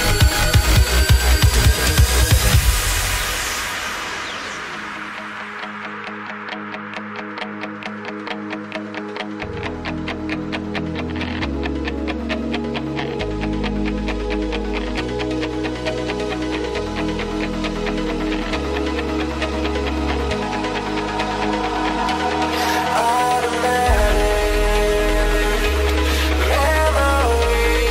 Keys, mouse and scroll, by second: 7.1-7.9 z, 11.0-14.4 scroll up 1, 14.4-16.2 scroll up 1, 18.4-19.1 scroll down 1, 22.2-23.6 scroll down 6, 26.9-27.9 scroll down 1.